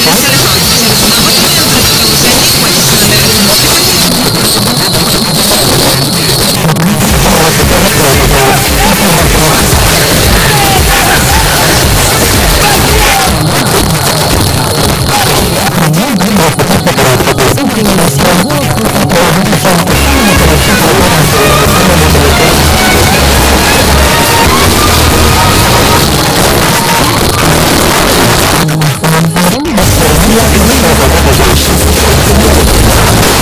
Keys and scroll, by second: 4.0 Page_Down, 13.1 Page_Down, 26.0 Page_Down.